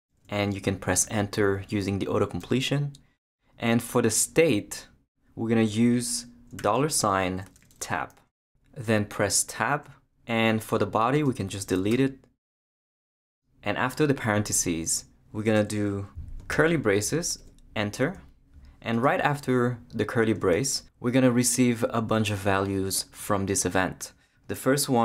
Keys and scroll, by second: 0.0-0.1 typing, 2.4 Return, 6.6-8.2 typing, 8.8 Tab, 11.9 shift+BackSpace, 12.4 BackSpace, 15.4 space, 16.5 shift+[, 17.4 shift+Return, 20.4 space.